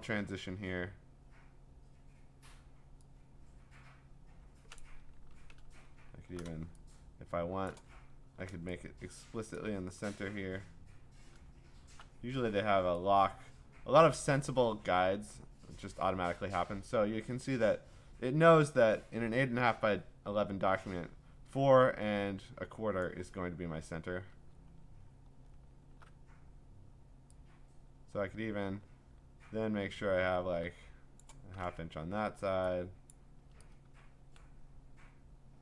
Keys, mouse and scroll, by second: 4.8 click, 5.1 ctrl+d, 6.1 scroll, 7.7 click, 7.9 scroll, 9.6 click, 11.4-12.6 scroll, 23.0 click, 24.5-25.7 scroll, 30.5-31.2 scroll, 31.2 shift+click, 33.1 click.